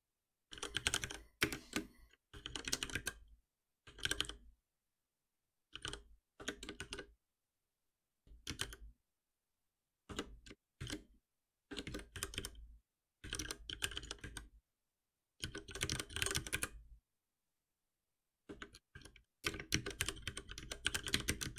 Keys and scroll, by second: 4.8 Return, 8.2 ctrl+z, 10.0 Return, 11.8 ctrl+shift+Right, 18.5 Return.